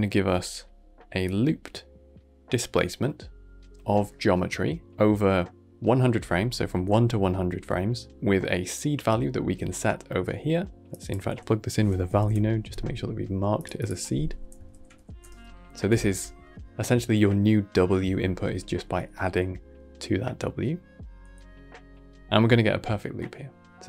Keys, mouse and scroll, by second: 1.1-2.8 drag, 2.8-6.1 middle drag, 10.8 click, 13.7 click, 13.8 F2, 14.8 shift+e.